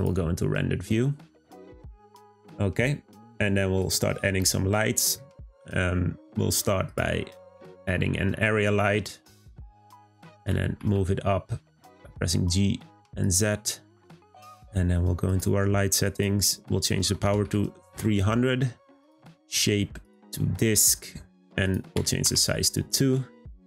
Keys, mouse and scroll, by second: 6.8 click, 7.6 shift+a, 10.4 g, 15.2 click, 16.0-17.4 drag, 17.4 0, 19.0-23.6 drag.